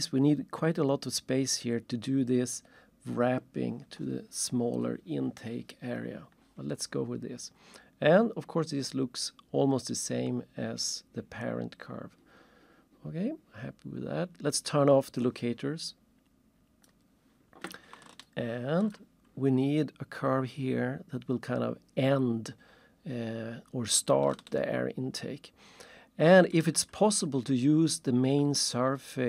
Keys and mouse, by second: 15.2 click, 16.9 click, 18.2 ctrl+shift+click, 24.5 alt+shift+right click, 25.5 alt+shift+middle click, 28.6 ctrl+shift+click.